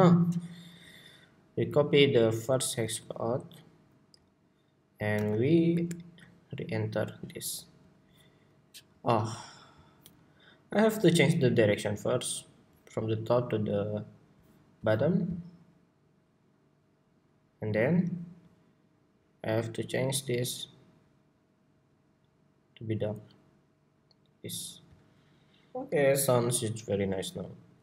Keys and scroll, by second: 2.7 super+c, 3.2 super+c, 4.9 super+v, 5.8 super+v.